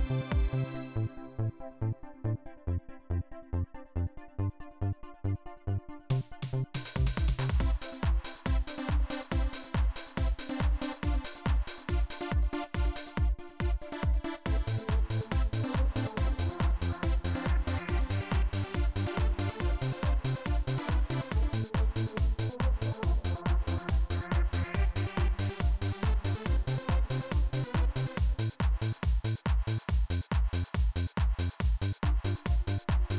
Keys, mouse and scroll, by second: 1.1-2.1 drag, 11.0 right click, 11.5 right click, 12.0 right click, 12.7 right click, 19.6 click, 21.9 click, 27.5 click, 28.9-30.0 drag, 30.5 click, 31.6 click.